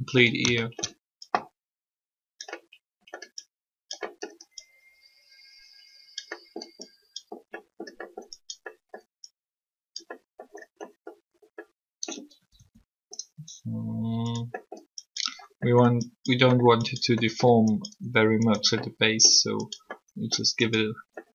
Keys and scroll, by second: 12.3 typing.